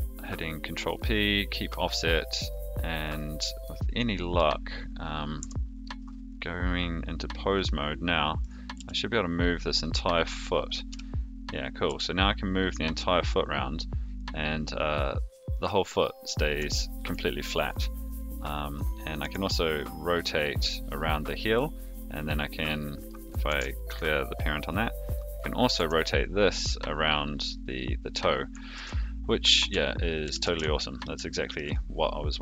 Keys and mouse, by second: 3.1 click, 3.6 middle click, 5.4 Tab, 7.6-8.4 middle drag, 8.7 g, 10.9 KP_3, 11.8 g, 16.7-17.0 shift+middle drag, 19.2 r, 22.5 click, 23.4 alt+r, 25.0 click, 25.7 r, 28.7 ctrl+z, 29.4 a, 30.2 alt+g, 30.4 alt+r, 31.3 shift+middle drag.